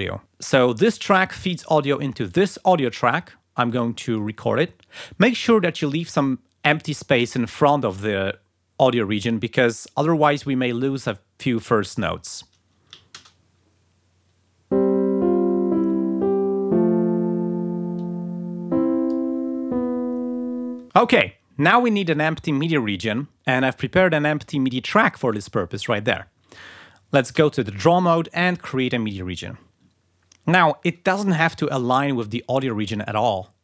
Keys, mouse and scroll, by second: 0.7 click, 2.2 click, 3.5 click, 13.1 shift+space, 17.9-19.5 drag, 24.3 click, 27.2 d, 28.4 click.